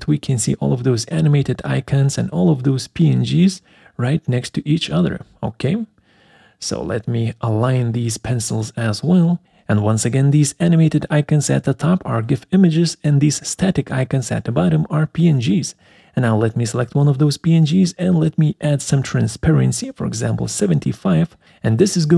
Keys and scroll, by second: 16.0 alt+4.